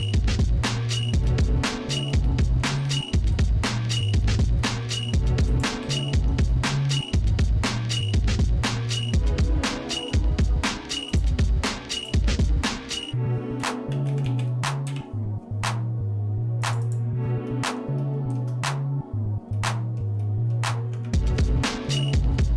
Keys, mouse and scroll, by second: 1.3 shift+middle click, 2.3 middle click, 2.9 shift+middle click, 4.2 middle click, 4.6 shift+middle click, 5.5 click, 6.5-8.8 shift+middle drag, 11.1 click, 12.1-17.1 drag, 17.5 middle click, 18.0 shift+middle click, 19.6 middle click, 20.2 middle click, 20.9 Tab, 21.5 shift+middle click, 22.1 middle click.